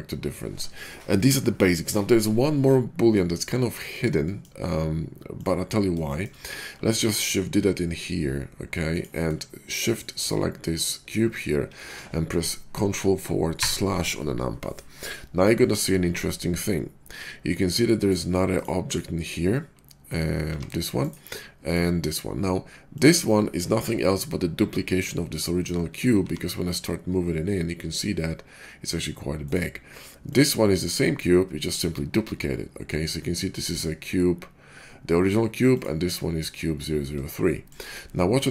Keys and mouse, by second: 6.9 shift+d, 13.4 ctrl+KP_Divide, 13.8-18.4 middle drag, 18.6 middle click, 20.3 g, 21.6 click, 22.8 click, 26.2 g, 30.2 click, 35.7-37.2 drag, 37.7-38.5 middle drag.